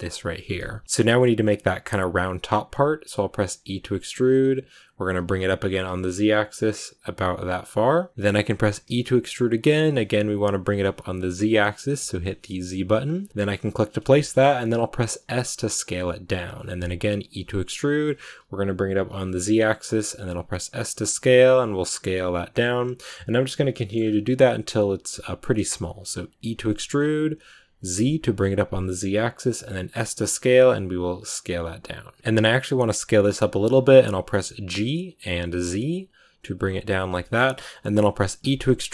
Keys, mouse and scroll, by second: 0.8-14.3 shift+middle drag, 14.3-15.0 scroll up 1, 15.0 s, 23.6 shift+middle click, 23.8 scroll up 2, 26.3 e, 32.1 scroll down 1, 32.2-37.5 middle drag, 37.5 scroll up 1, 38.3 e.